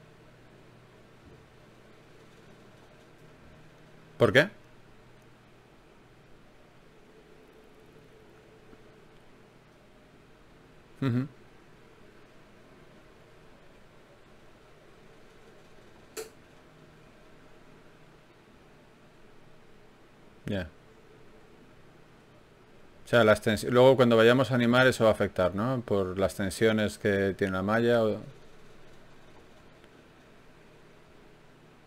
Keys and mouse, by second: 23.2 n, 24.4-28.2 drag, 25.2 n, 28.2-31.8 middle drag.